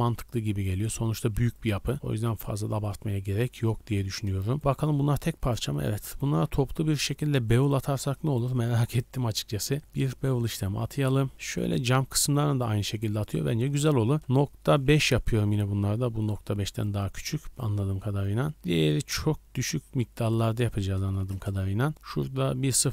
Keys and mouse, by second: 0.8-3.1 drag, 0.8 a, 1.0 a, 3.2-4.1 drag, 4.4 shift+middle click, 4.9 click, 4.9 g, 5.2 click, 5.6-8.0 shift+drag, 8.4-8.9 drag, 8.9-11.3 middle drag, 11.3 shift+b, 11.4-14.2 drag, 14.2-22.9 middle drag.